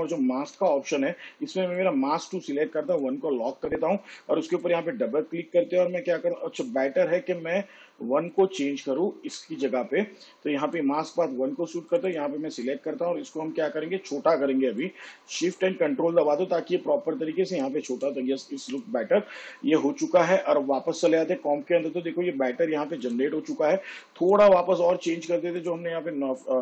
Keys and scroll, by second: 1.2 m.